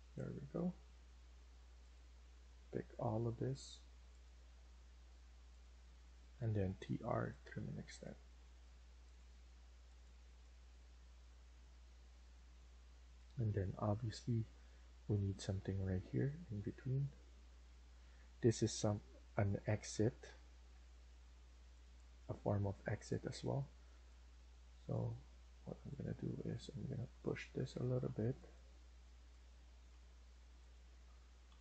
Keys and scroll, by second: 5.5 Escape, 5.8 Escape, 6.0-7.0 typing, 10.7 Escape, 22.3 Escape, 25.1 Escape, 27.8 Escape, 29.9 Escape, 31.3 Left, 31.5 Left.